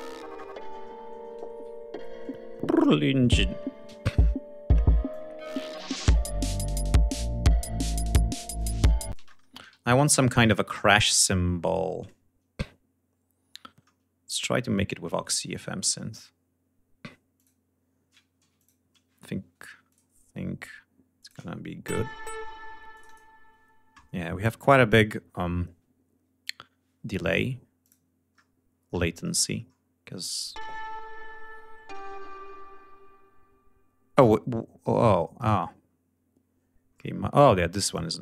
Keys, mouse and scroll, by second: 0.3-0.6 scroll up 2, 0.9 ctrl+scroll down 2, 2.9 scroll up 2, 3.5 scroll down 2, 4.6 click, 7.8 click, 8.7 ctrl+space, 9.3 ctrl+scroll up 2, 10.2 scroll down 2, 10.4 click, 10.9-11.3 scroll down 2, 11.4-11.8 scroll up 2, 13.4 scroll up 2, 14.1-14.5 scroll up 2, 14.5 scroll down 2, 15.2 scroll down 2, 16.9 click, 17.9 ctrl+s, 18.1 ctrl+click, 19.4 click, 20.7 click, 22.5 click, 24.1 click, 27.3 click, 27.8-28.6 scroll down 1, 28.7-29.2 scroll down 1, 29.7 click, 34.9 click, 35.5-36.4 scroll up 4, 36.4 scroll down 2, 36.6-36.9 scroll up 2, 37.4 click.